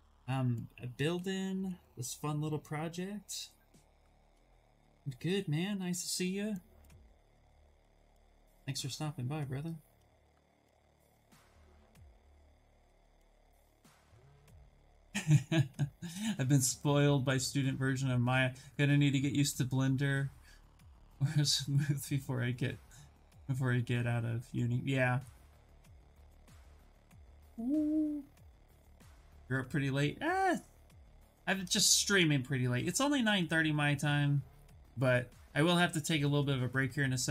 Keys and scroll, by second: 1.0 s.